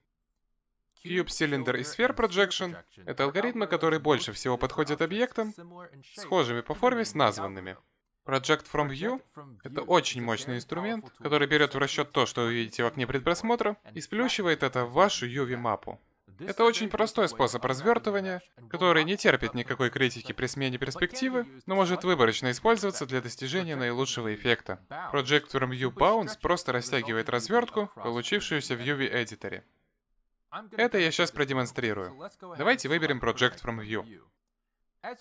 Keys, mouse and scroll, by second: 29.1 middle click, 31.3 click.